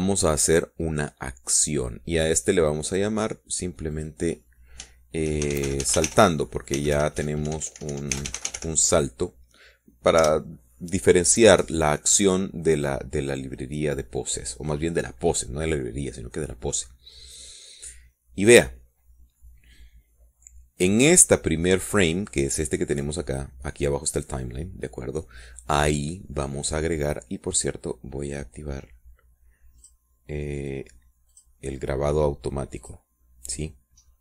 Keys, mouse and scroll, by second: 4.4 click, 5.5 click, 7.0-10.1 typing, 11.7 Return, 21.3 middle click, 21.8-23.0 drag, 31.3 click, 32.8 click.